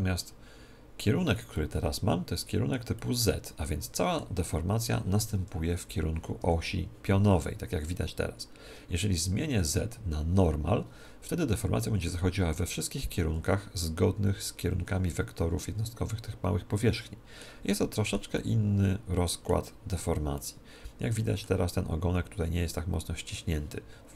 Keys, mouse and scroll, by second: 1.5-4.9 middle drag, 5.3 KP_1, 6.4 z, 9.6-11.6 drag, 14.1 z, 16.0-20.2 middle drag, 20.3-22.1 middle drag.